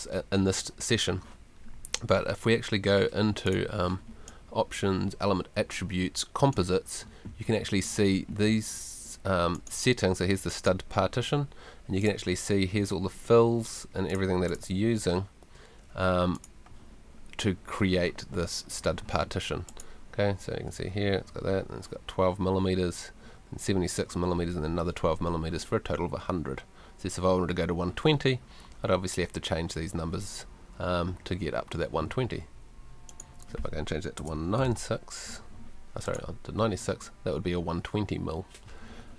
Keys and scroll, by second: 34.2 BackSpace, 34.6 9.